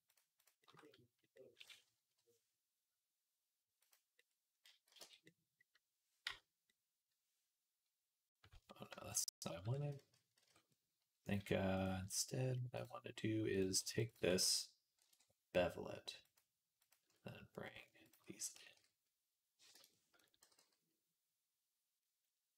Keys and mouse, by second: 0.2 click, 1.9 i, 4.7 x, 6.1 /, 9.3 ctrl+z, 9.6 ctrl+z, 10.3 ctrl+z, 11.1 click, 12.6 click, 13.8 alt+shift+click, 14.8 ctrl+b, 16.6 click, 18.4 g, 19.8-22.5 drag, 20.2 g.